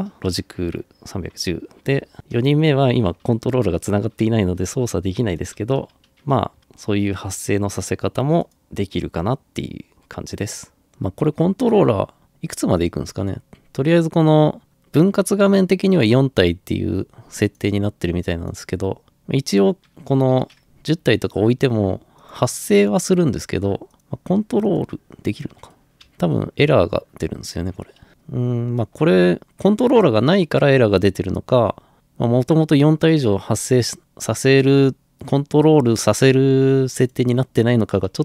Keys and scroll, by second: 5.6-6.0 typing, 6.6 Escape, 20.4-21.1 typing, 25.8-28.1 typing, 28.1 Escape.